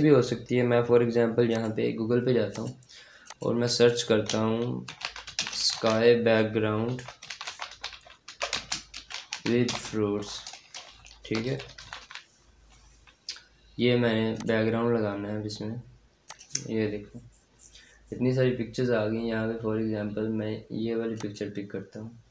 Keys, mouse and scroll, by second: 4.5-9.9 typing, 10.9-12.4 typing, 14.2 click, 17.9 scroll down 1, 21.0 click.